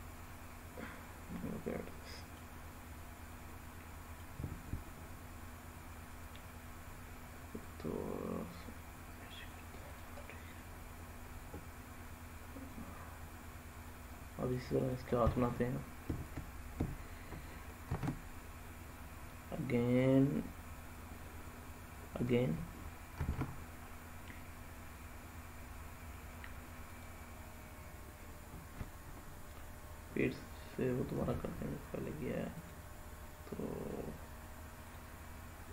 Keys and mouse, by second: 3.1-4.1 middle drag, 6.0 click, 7.5-9.3 drag, 10.1-14.4 middle drag, 14.6 click, 15.0 middle click, 17.7 shift+a, 23.0 shift+a, 31.0 s, 32.4 click.